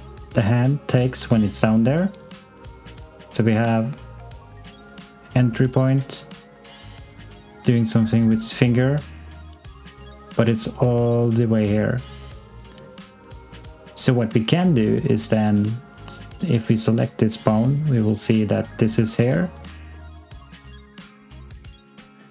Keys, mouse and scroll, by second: 15.3 s, 15.9 click.